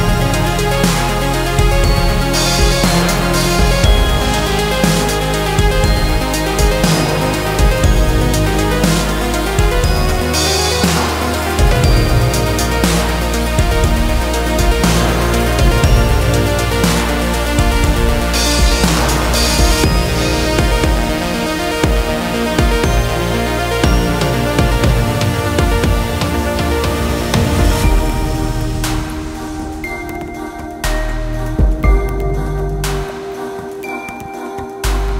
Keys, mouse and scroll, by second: 0.5 ctrl+r, 2.8-3.4 scroll up 2, 3.4 ctrl+r, 5.7 ctrl+r, 9.0-9.8 scroll down 3, 9.8 click, 10.3-11.8 middle drag, 11.8-12.2 scroll up 2, 12.2-13.7 middle drag, 13.7-14.9 scroll down 4, 14.9-16.4 middle drag, 16.4 a, 18.1-20.7 drag, 20.8-23.4 drag, 24.8-27.4 drag, 27.7 scroll up 2, 27.9-29.2 middle drag, 29.2 ctrl+s, 29.4 scroll down 2, 29.7 middle click, 30.1 scroll up 3, 30.4-31.7 middle drag, 31.7-32.2 scroll down 2, 32.2-33.6 middle drag, 33.6-34.3 scroll up 4.